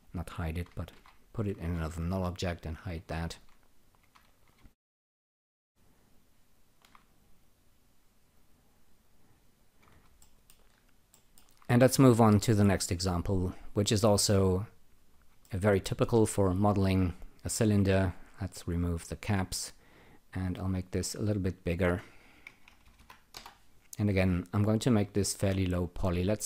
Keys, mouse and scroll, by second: 0.9 alt+g, 2.6 alt+shift+click, 4.9 alt+shift+click, 5.4 alt+shift+click, 6.1 alt+shift+click, 6.5 alt+shift+click, 7.4 click, 8.3 click, 9.0 click, 9.5 click, 10.2 alt+middle click, 10.7 alt+right click, 11.1 alt+middle click, 13.6-15.0 drag, 15.5 alt+middle click, 18.1 click, 19.2 click, 20.2 click, 21.3 click, 22.2-23.4 typing, 25.8 click.